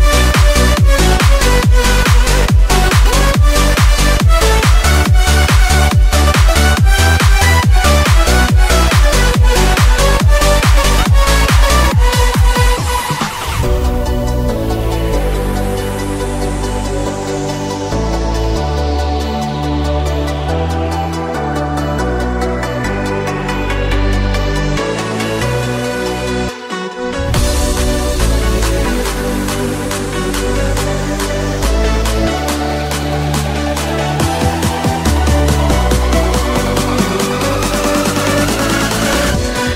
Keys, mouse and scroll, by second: 0.0-3.1 typing, 1.1-2.5 middle drag, 3.1-4.6 alt+shift+middle drag, 4.6-13.5 alt+shift+drag, 5.3 g, 10.5 z, 11.2 KP_1, 11.5 z, 11.9 g, 13.5 middle click, 13.5 a, 14.0 click, 14.5 shift+middle click, 14.8 ctrl+b, 14.8 ctrl+middle click, 16.0 a, 16.1 Tab, 16.3 z, 17.0 z, 17.3 a, 17.5-22.7 alt+shift+middle drag, 19.6 Tab, 21.2 f, 21.7 i, 22.2 i, 22.7-25.7 alt+drag, 23.4 i, 23.9 i, 25.0 i, 25.5 m, 25.7 middle click, 26.3-27.5 drag, 26.8 KP_1, 28.1 shift+d, 28.9 z, 29.2 s, 30.5 s, 32.5-36.7 drag, 33.2 e, 34.9 g, 35.7 s, 36.7 alt+shift+middle click, 37.1 alt+click, 37.2 e, 37.8 s, 38.4-39.7 alt+shift+drag, 39.0 e.